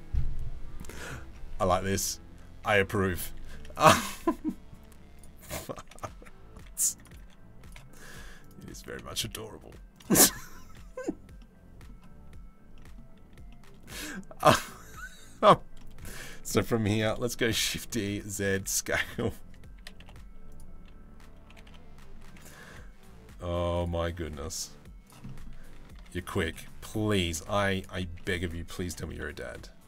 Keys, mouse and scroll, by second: 0.9 Tab, 1.5 g, 3.2 middle click, 3.6 s, 5.4 g, 6.8 3, 7.7 click, 8.4 g, 9.8 middle click, 11.1 middle click, 12.4 middle click, 13.1 middle click, 14.1 middle click, 15.4 middle click, 17.0 shift+d, 18.1 s, 19.4 s, 21.1 g, 22.3 e, 23.9 g, 24.9 middle click, 25.6 ctrl+r, 26.3 middle click, 26.9 3, 27.8 middle click, 28.4 s.